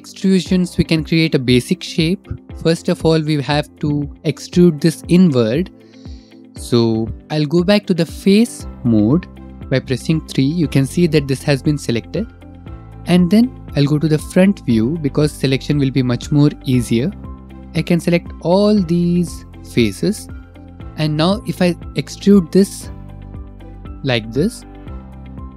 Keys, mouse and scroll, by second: 1.8 click, 2.3 middle click, 2.7 middle click, 6.7 middle click, 7.3 3, 7.3 2, 10.7 3, 14.5 middle click, 16.4 click, 16.8 middle click, 17.0 middle click, 22.7 middle click, 23.4 e.